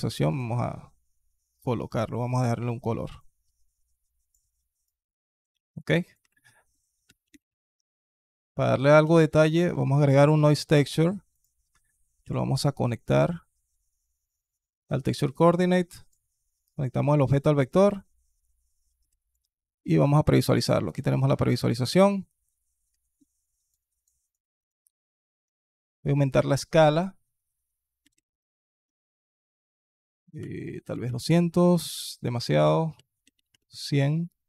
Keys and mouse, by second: 0.1 click, 1.7 click, 2.3 drag, 5.6 click, 5.9 click, 6.0 shift+a, 10.7 middle click, 11.2 click, 12.1 ctrl+t, 12.9 click, 15.2-15.9 drag, 17.5 click, 19.1 ctrl+shift+click, 25.4 click, 26.3 click, 26.7-31.1 drag, 30.9 KP_0, 32.4-33.4 drag, 33.2 KP_0.